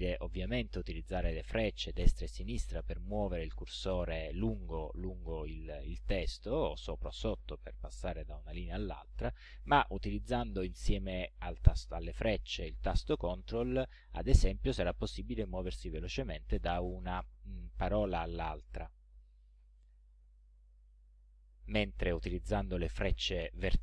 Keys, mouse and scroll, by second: 1.7 Left, 6.1 Down, 8.2 Up, 13.6 ctrl+Right, 18.6 ctrl+Left, 21.3 ctrl+Right.